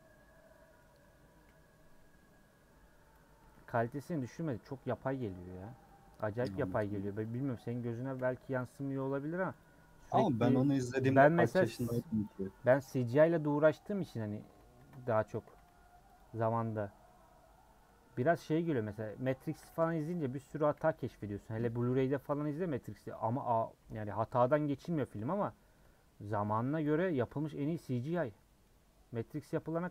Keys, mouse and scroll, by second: 1.0 middle click, 1.4 /, 2.1 /, 2.6 /, 3.4 Tab, 3.7 h, 4.1 click, 4.3 Tab, 4.5 middle click, 5.0 2, 5.8-6.9 middle drag, 6.9 alt+click, 7.4 middle click, 8.1 /, 8.3 middle click, 11.2 a, 12.8 u, 13.5-14.5 middle drag, 14.5 Tab, 15.1 ctrl+a, 15.2 Tab, 16.7 u, 17.0 /, 17.8 middle click, 18.2 Tab, 18.5 click, 19.0 click, 19.6 h, 20.0 click, 20.7 /, 21.2 Tab, 21.8 alt+click, 22.3 a, 23.2 u, 23.8 Tab, 24.0 h, 25.9 space, 26.7 alt+h, 27.9 /, 28.6 /, 29.1 /, 29.3 scroll up 1, 29.6 middle click.